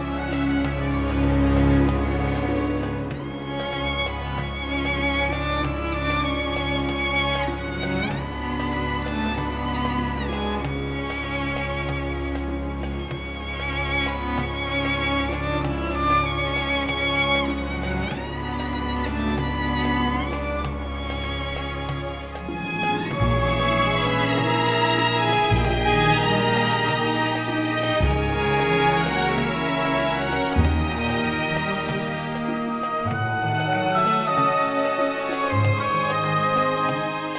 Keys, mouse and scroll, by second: 2.1 click, 4.1 click, 6.8 click, 8.9 m, 9.8 m, 11.4 m, 13.4 click, 14.6-14.9 scroll up 1, 15.0 Escape, 15.9 Escape, 16.5 click, 18.4 click, 20.5 click, 22.1 click, 23.6 click, 24.8-26.3 drag, 27.4 click, 29.5 click, 31.0 1, 31.9 click, 33.5 click, 34.5 click, 35.8 click, 37.1 click.